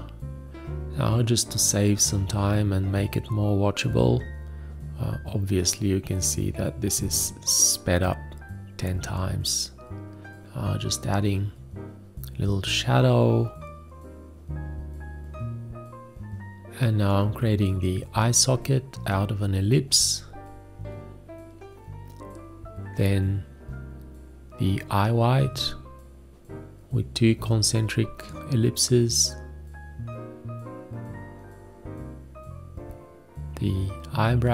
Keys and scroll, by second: 0.0 shift+., 3.0-4.8 typing, 6.2 a, 8.0 ctrl+Tab, 8.6 d, 9.0 Escape, 9.9 ctrl+a, 10.0 space, 10.9 ctrl+s, 11.6 ctrl+space, 11.8 7, 12.5 space, 12.7 d, 14.8 o, 15.7 ctrl+shift+g, 16.0 o, 16.1 ctrl+space, 16.3 q, 20.8 F5, 24.0 ctrl+c, 24.1 ctrl+shift+v, 26.2 ctrl+a, 26.2 space, 27.8 ctrl+space, 28.6-30.9 typing, 32.6 ctrl+shift+g, 32.8 r.